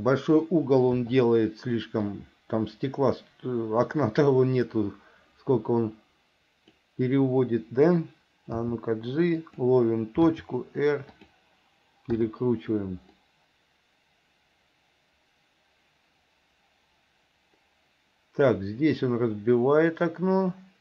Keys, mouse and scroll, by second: 1.2 i, 2.3-7.0 drag, 8.8 g, 10.4 r, 12.4 i, 13.4-20.8 drag.